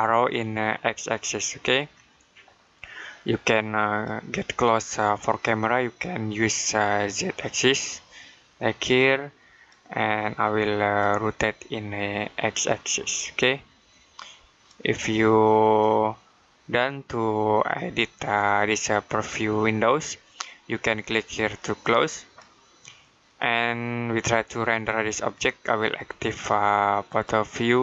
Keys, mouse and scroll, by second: 6.9 click, 21.6 click, 26.9 click.